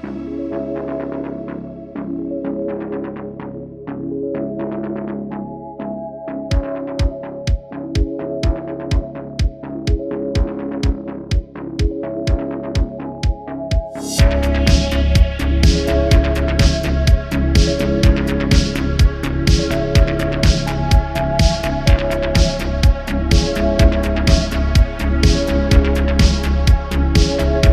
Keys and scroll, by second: 3.6 q, 5.1 q, 9.2 shift+d, 10.1 s, 15.5 shift+d, 15.7 x, 16.7 ;, 19.3 s, 20.6 ., 22.8 shift+d, 23.1 y, 23.3 y.